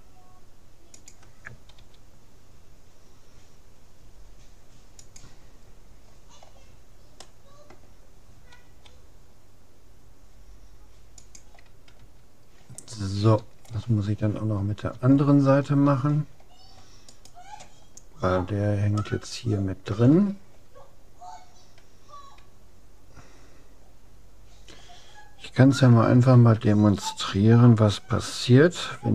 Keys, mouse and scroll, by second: 1.9 g, 6.1-8.9 middle drag, 8.7 g, 12.1 a, 12.5 middle click, 13.7-15.9 middle drag, 17.1-18.7 right drag, 18.7 click, 19.1-20.7 middle drag, 26.3 a, 28.9 c.